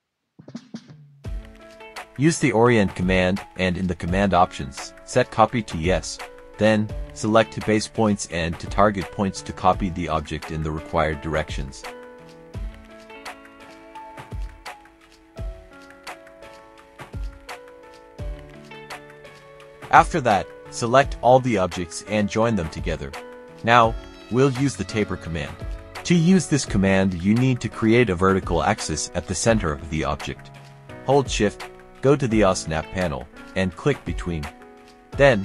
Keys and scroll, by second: 1.8-3.0 typing, 3.9 Return, 19.0 Escape, 20.4 typing, 22.0 ctrl+j, 25.5-27.8 typing.